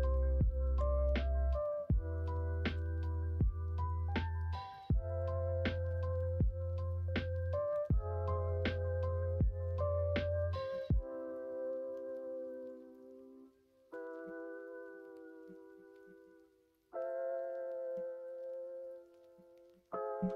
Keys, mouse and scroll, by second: 0.7 l, 1.5 middle click, 2.7 h, 3.0 middle click, 4.7 1, 5.0 click, 5.5 middle click, 6.1-9.6 middle drag, 10.6-12.0 middle drag, 12.6-13.9 drag, 14.2 middle click, 15.0 middle click, 15.7 middle click, 16.1-17.4 middle drag, 17.8-19.3 middle drag, 19.7 middle click.